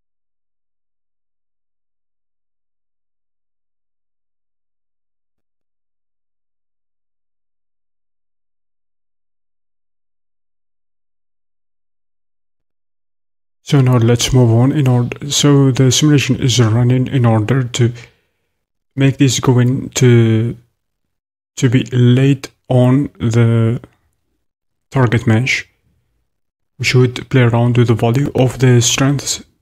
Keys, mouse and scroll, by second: 12.6-29.6 shift+drag.